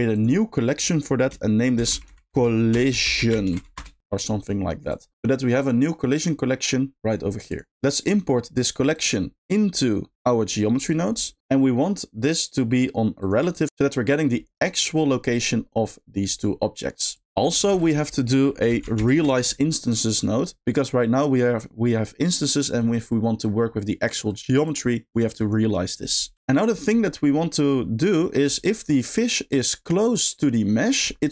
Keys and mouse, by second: 5.3 click, 7.5 click, 7.9 middle click, 9.0 click, 10.5 middle click, 13.6 click, 14.0 middle click, 17.4 click, 17.7 shift+a, 24.6 click, 25.3 click, 26.1-28.8 drag, 28.8 middle drag.